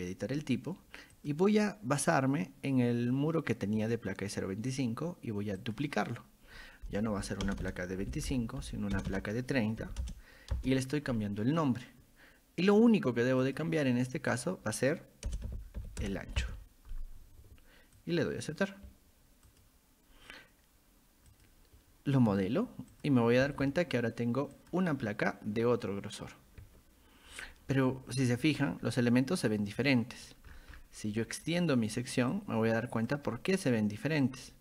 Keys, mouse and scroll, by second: 1.2 click, 3.8 click, 5.6 click, 7.1 Right, 7.5 BackSpace, 8.1 Left, 8.3 Left, 8.6 Right, 9.0 BackSpace, 12.8 click, 13.4 click, 14.3 click, 18.0 click, 19.5 click, 21.3 click, 22.9 click, 24.6 click, 28.2 middle click, 28.6-29.1 scroll up 2, 30.2-30.9 scroll down 2, 30.5 middle click, 31.5 click, 32.3-33.1 drag, 34.2-34.6 drag.